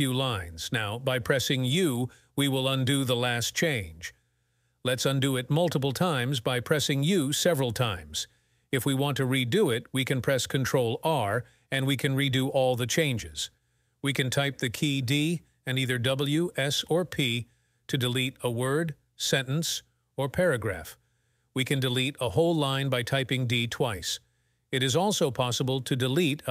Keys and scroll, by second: 0.1 p, 0.9 p, 4.8 u, 5.5 u, 10.5 ctrl+r, 14.4-15.1 typing, 16.6-17.4 typing, 18.5-19.9 typing, 22.2 d, 25.2 d, 25.6 t.